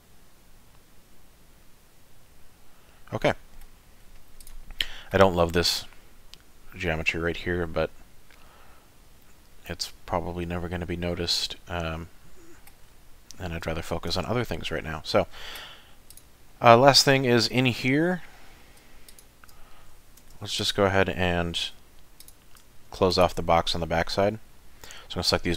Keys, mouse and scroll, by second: 3.1 middle click, 4.0-4.4 scroll down 2, 4.4 click, 4.8 middle click, 7.3 scroll down 2, 7.6 scroll up 4, 8.3 middle click, 12.8-13.3 scroll down 4, 13.3-13.6 scroll up 3, 13.7 shift+middle click, 14.2 middle click, 16.1 click, 16.5 middle click, 19.1 shift+click, 20.2 3, 20.6 click, 21.8 2, 22.2 click, 23.1 shift+click, 23.6 middle click.